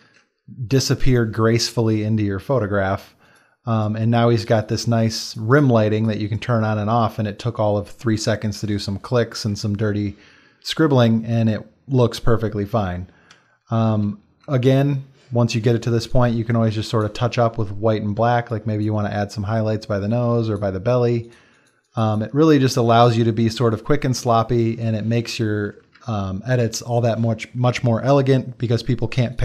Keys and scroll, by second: 13.9 x, 14.3 x, 18.1 x, 22.5 x, 23.5 x, 25.7 space.